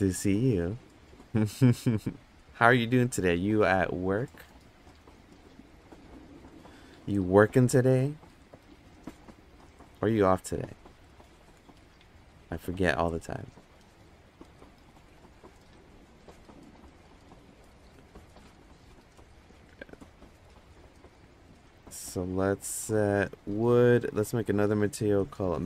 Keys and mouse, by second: 5.6 click, 16.4 click, 23.4 click, 24.2-25.3 drag.